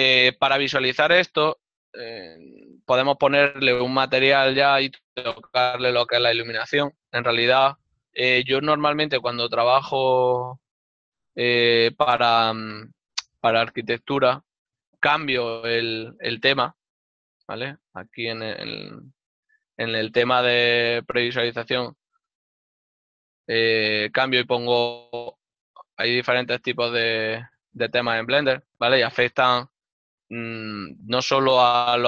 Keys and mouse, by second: 3.0 n, 7.1 ctrl+middle click, 8.9 n, 11.0 middle click.